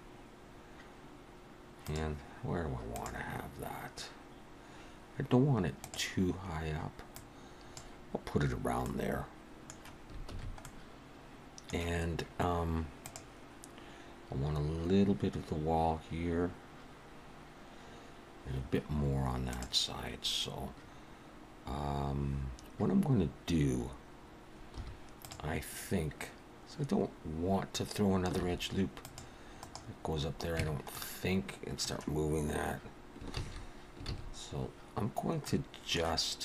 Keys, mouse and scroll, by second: 7.1 click, 8.8 middle click, 10.3 alt+a, 10.6 middle click, 24.8 2, 25.2 click, 28.4 ctrl+r, 30.6 Tab, 30.9 middle click, 33.3 ctrl+z, 34.1 ctrl+z, 35.4 middle click.